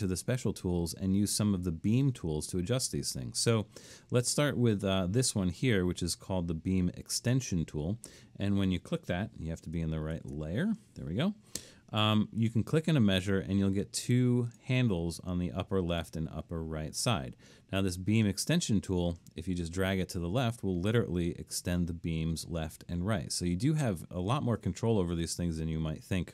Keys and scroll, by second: 10.2 alt+super+1.